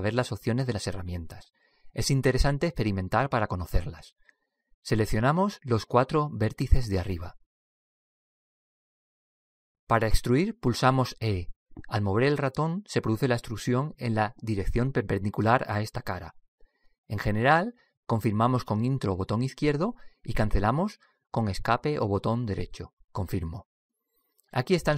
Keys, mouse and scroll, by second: 0.0 t, 3.5 middle click, 5.9-9.8 right drag, 8.4 middle click, 10.3-11.6 middle drag, 11.6 e.